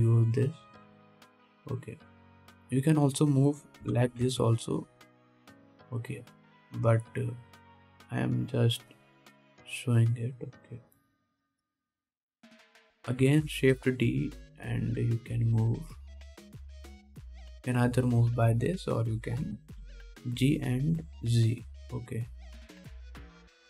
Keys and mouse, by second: 0.5-7.5 middle drag, 5.0 g, 7.5-9.4 drag, 9.4 middle click, 14.4 shift+d, 14.7-16.4 drag, 16.4-23.6 middle drag, 20.6 g.